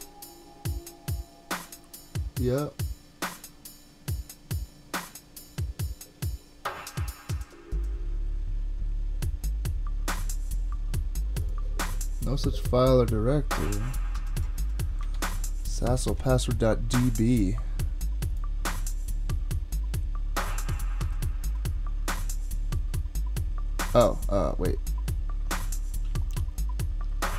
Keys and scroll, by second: 15.1 super+Tab, 16.1 super+Tab.